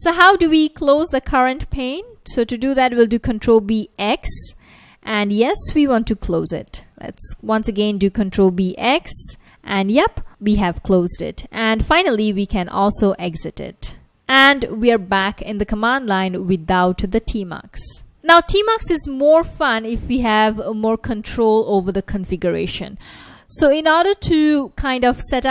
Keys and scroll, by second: 3.6 ctrl+b, 4.0 x, 5.7 y, 8.4 ctrl+b, 9.2 x, 10.3 y, 11.9-13.4 typing.